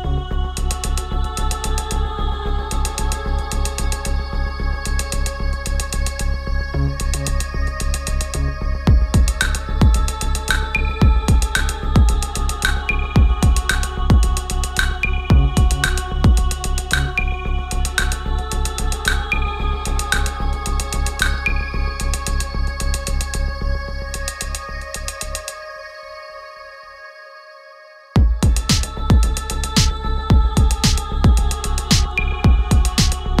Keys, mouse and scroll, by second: 0.7-8.1 drag, 8.4 ctrl+a, 11.6 BackSpace, 15.1 click, 15.3 right click, 16.2 click, 18.9 click, 22.8 ctrl+a, 23.2 BackSpace, 27.0 click, 32.1 ctrl+a, 32.5 BackSpace.